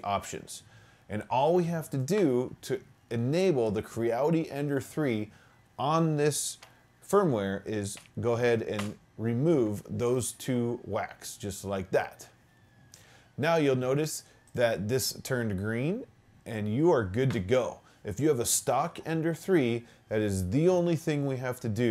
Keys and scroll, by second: 8.0 BackSpace, 8.8 BackSpace.